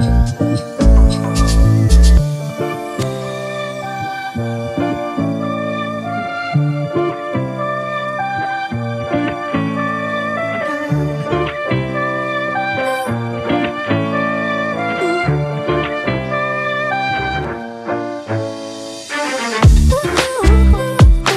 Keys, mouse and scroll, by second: 0.9 e, 20.1 e.